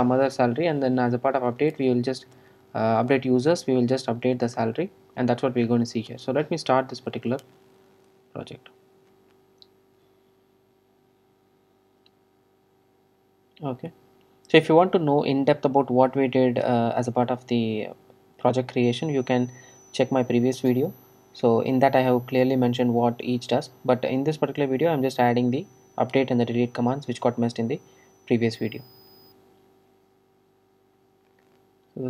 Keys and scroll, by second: 9.1 ctrl+r.